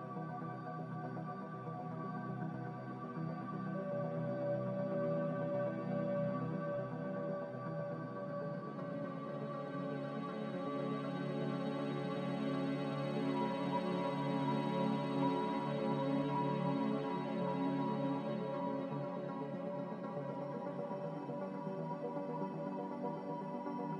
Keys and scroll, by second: 0.2 n, 2.7 m, 4.1 Escape, 8.9 a, 15.0 3, 16.8 2, 18.4 m, 19.9 a.